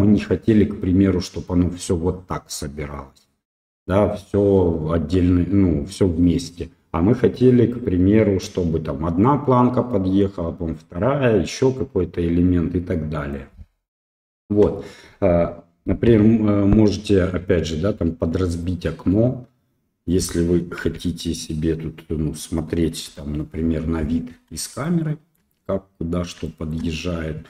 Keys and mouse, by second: 11.8-13.3 drag, 14.2 shift+middle click, 18.6-20.1 drag, 20.8 n, 23.0 KP_0, 24.8-25.3 shift+middle drag, 26.4 shift+middle click.